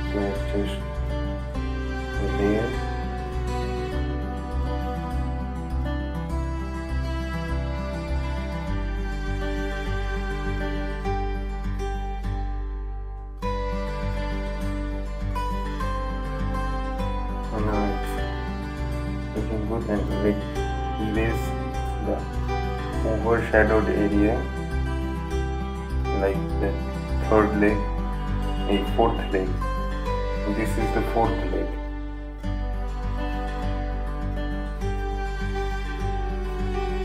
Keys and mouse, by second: 18.2-24.3 drag, 24.9 right click, 26.2 click, 26.5 right click, 28.0-37.0 drag.